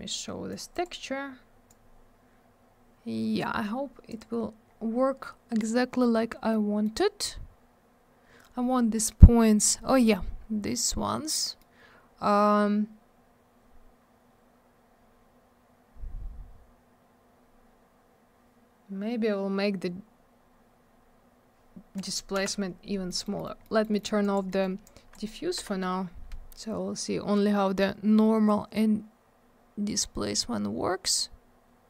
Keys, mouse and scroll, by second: 0.5 click, 0.5 click, 0.7 click, 0.8 click, 1.7 click, 4.1 click, 4.2 click, 4.6 scroll up 1, 6.5 middle click, 7.3-8.1 scroll up 1, 10.4-10.9 scroll down 1, 11.6 middle click, 14.0-15.0 scroll up 1, 15.0-16.3 scroll down 1, 16.3-17.1 scroll up 1, 17.4-18.4 scroll down 1, 20.8-21.3 scroll up 1, 21.3 scroll down 1, 21.9 click, 22.0 click, 22.3 m, 23.0 middle click, 23.2 middle click, 23.3 middle click, 23.4 middle click, 23.5 scroll up 1, 23.6 middle click, 23.8 double middle click, 23.9 middle click, 24.0 middle click, 24.2 click, 24.3 double click, 24.5 middle click, 24.6 middle click, 24.8 click, 25.6 Delete, 29.2 scroll up 1, 31.0 scroll down 1.